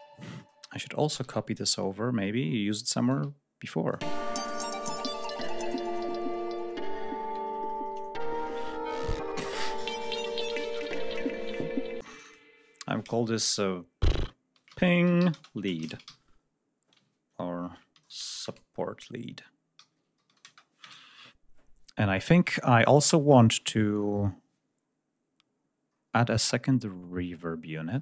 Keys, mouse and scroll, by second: 1.0 ctrl+s, 1.5-3.2 ctrl+drag, 3.5-4.0 drag, 4.0 space, 4.2 ctrl+scroll up 2, 5.7 ctrl+scroll down 1, 6.3 ctrl+scroll down 1, 7.9 ctrl+scroll up 1, 8.8 scroll up 1, 11.1 click, 11.9 space, 12.0 click, 14.4-16.0 typing, 17.5 ctrl+Left, 17.9 ctrl+s, 17.9 ctrl+u, 18.1 ctrl+o, 18.3 ctrl+BackSpace, 19.7-20.3 typing, 20.7 Return, 22.8 right click, 25.8-26.2 scroll down 1, 27.8-28.0 scroll down 2.